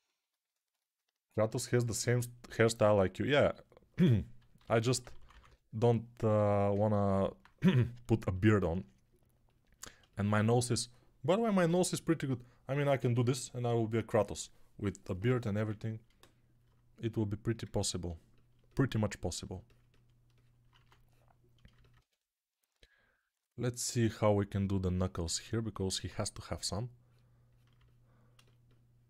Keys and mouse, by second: 4.5-5.3 typing, 20.6 1, 21.8 1, 27.6-29.0 alt+drag, 27.6-29.0 alt+right drag.